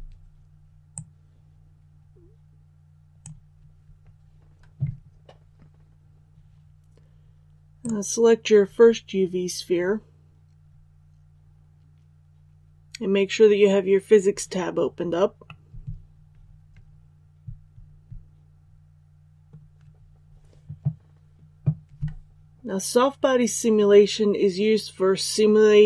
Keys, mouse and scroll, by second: 0.8-3.6 drag, 7.7 right click, 15.4-19.6 middle drag.